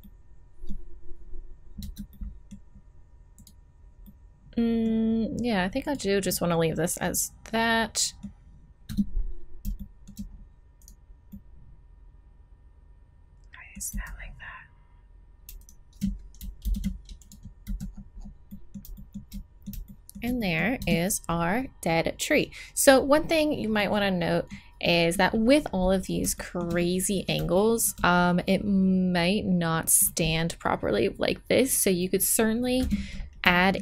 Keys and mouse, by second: 1.8 Tab, 3.3-5.1 middle drag, 5.8 middle click, 8.9 Tab, 11.5 middle click, 12.5 middle click, 13.9 z, 15.6-17.3 drag, 16.6 alt+m, 17.6 z, 20.3 middle click, 20.8 Tab, 26.3 middle click, 28.0-30.4 middle drag, 32.8 Tab, 33.1-33.8 middle drag.